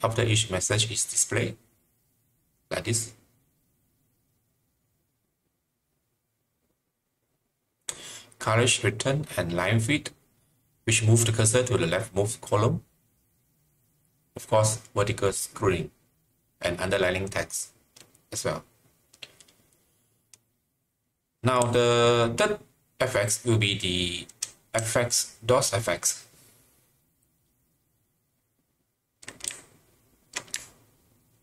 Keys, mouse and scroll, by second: 22.0-27.9 typing, 29.2-31.4 typing.